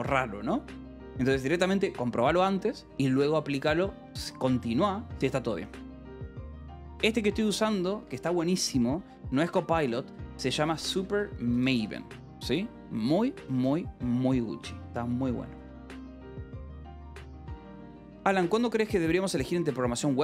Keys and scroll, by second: 7.4 a, 7.9 Escape, 8.1 o, 8.6 Return, 9.1-12.1 typing, 13.9 shift+v, 15.6 d, 15.8 Escape, 16.1 BackSpace, 16.6 a, 16.8 Escape, 18.1 ctrl+s.